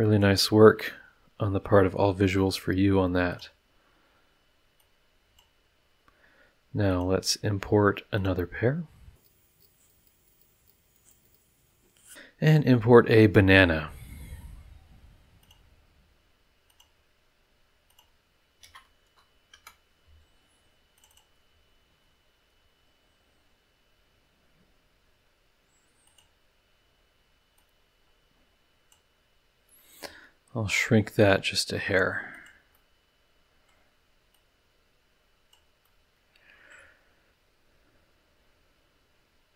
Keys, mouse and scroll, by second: 1.5 middle click, 3.3 click, 4.8-5.6 drag, 6.9 click, 8.2 click, 9.2 click, 9.6 click, 9.9 click, 10.2 click, 10.6 click, 10.9 click, 11.2 click, 11.4 middle click, 15.4 click, 16.7 click, 17.9 click, 18.6 ctrl+v, 19.5 KP_Enter, 20.9 click, 26.0 click, 27.5-29.1 drag, 30.0 s, 32.3 click, 32.7-33.8 middle drag, 34.3-35.7 drag, 35.8-36.9 middle drag.